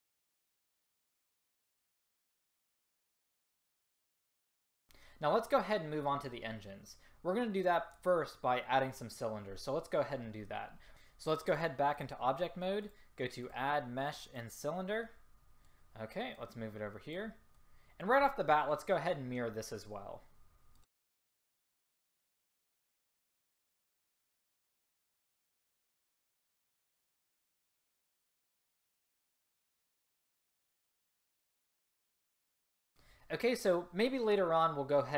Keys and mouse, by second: 0.0 click, 0.1 click, 0.9 click, 1.4 a, 1.9 drag, 2.5 a, 3.3-4.1 drag, 4.5 a, 9.1 click, 10.9 ctrl+z, 12.1-12.9 drag, 14.4-15.2 drag, 16.4-17.6 drag, 17.8-19.7 drag, 20.8 click, 21.2 click, 21.9-22.3 drag, 22.3 r, 23.8-24.1 drag, 24.1 s, 24.8-25.1 drag, 25.5-26.3 drag, 26.3 s, 26.7 click, 27.1-28.6 drag, 29.7-30.3 drag, 30.8 s.